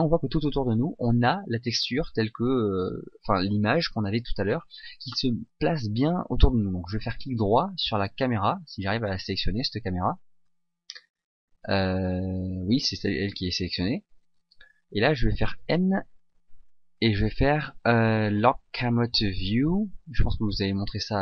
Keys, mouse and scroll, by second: 7.2 right click, 8.7 right click, 15.9 n, 18.6 scroll up 1.